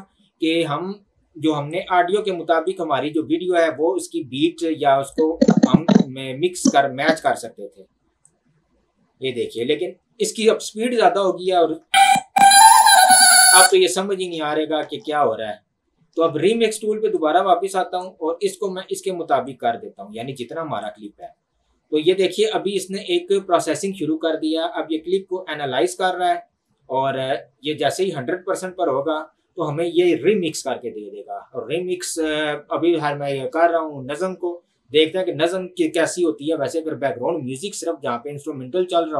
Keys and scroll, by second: 11.9 space, 13.6 space, 14.8 ctrl+z.